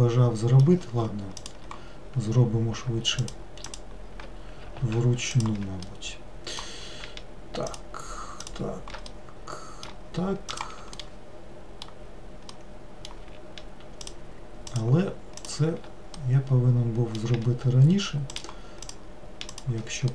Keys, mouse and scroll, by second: 1.5 click, 3.3 shift+click, 3.7 shift+click, 4.8 ctrl+z, 5.4 shift+click, 5.9-7.8 middle drag, 7.8 shift+click, 8.5 shift+click, 9.1-10.6 middle drag, 10.6 shift+click, 11.1-14.1 middle drag, 14.1 shift+click, 14.8 shift+click, 15.4 shift+click, 16.2-18.4 middle drag, 18.4 shift+click, 18.9 shift+click, 19.6 shift+click.